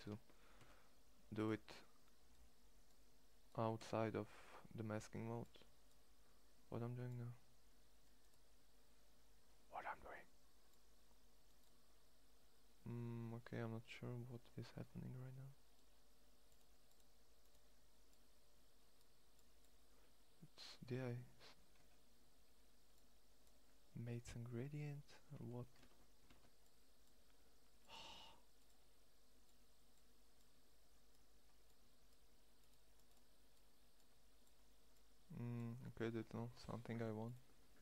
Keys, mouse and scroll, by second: 0.3 Escape, 3.5 Escape, 14.4-21.4 middle drag, 21.4 `, 25.5 ctrl+Tab, 26.0 ctrl+Tab.